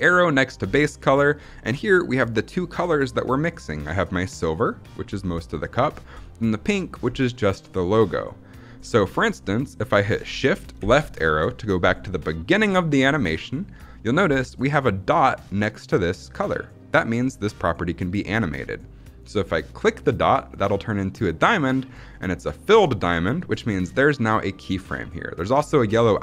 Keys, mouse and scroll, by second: 10.7 shift+Left, 19.6 click.